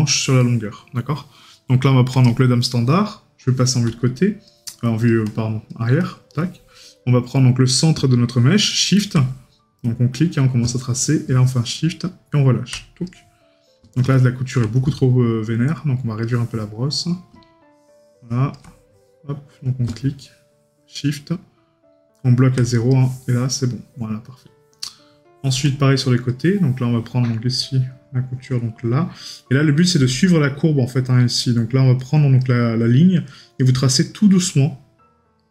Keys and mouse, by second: 0.5 right click, 29.4 right click.